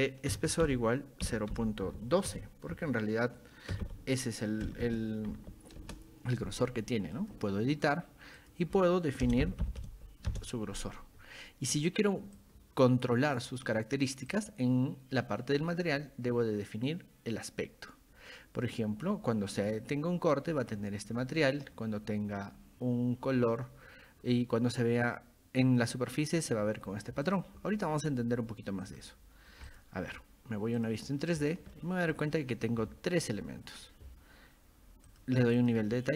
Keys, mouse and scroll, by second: 0.0-4.7 typing, 7.2 click, 8.4 click, 12.4-13.4 drag, 14.3 click, 27.3 click, 28.1 click, 28.9 click, 29.7 click, 30.8 click, 31.7-32.1 shift+middle drag, 32.8-33.2 shift+middle drag, 33.5 scroll up 2, 35.1 click, 35.6 click.